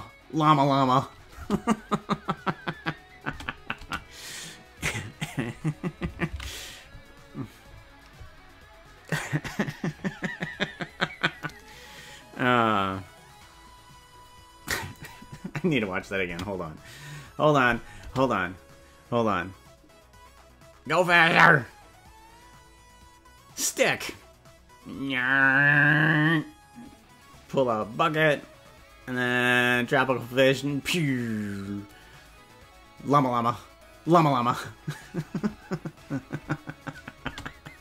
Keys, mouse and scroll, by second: 1.3 space, 3.3 space, 3.7 space, 8.1 ctrl+s, 14.9 click, 16.3 space, 17.9 space, 37.3 space.